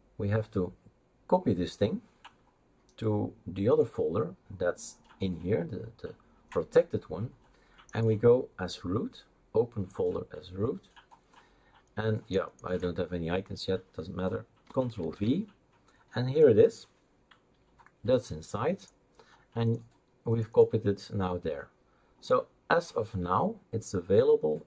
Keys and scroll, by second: 15.1 ctrl+v.